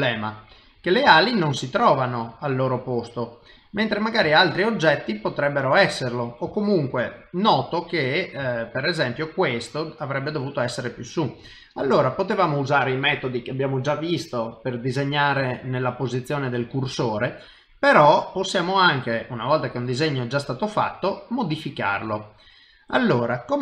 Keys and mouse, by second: 0.0 middle click, 1.1 shift+middle click, 1.9 middle click, 3.2 middle click, 4.4 shift+middle click, 5.0 middle click, 6.5 shift+middle click, 7.0 middle click, 8.5 shift+middle click, 10.7 middle click, 11.5 ctrl+middle click, 17.4 middle click, 19.7 middle click, 21.4 middle click.